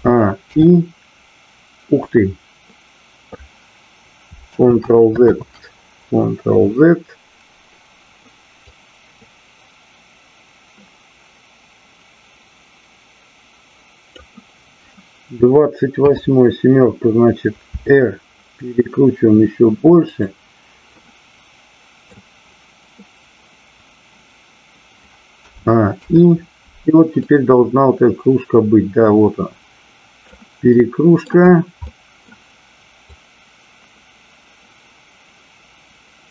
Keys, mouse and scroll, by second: 5.3 ctrl+z, 8.6-14.2 drag, 16.0 KP_7, 17.7 r, 20.0 click, 20.9-22.1 middle drag, 27.2-30.3 drag, 30.7-31.1 middle drag, 31.8-32.2 middle drag, 33.1-36.3 drag.